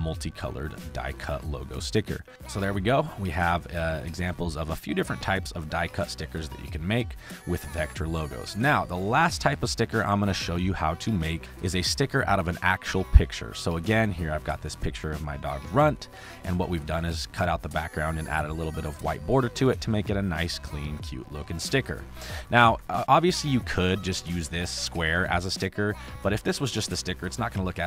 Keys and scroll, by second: 0.3 space, 8.5 space, 9.6 space, 12.9 space, 16.1 space, 22.1 space, 26.7 m.